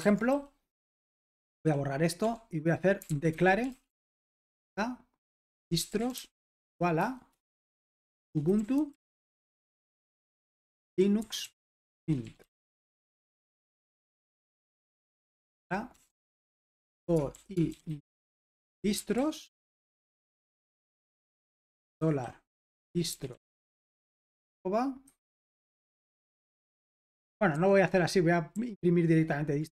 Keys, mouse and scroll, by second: 0.0 super+l, 0.0-13.2 typing, 13.6 Escape, 14.7-23.8 typing, 25.0-25.4 typing, 26.8-28.5 typing, 27.2 Escape.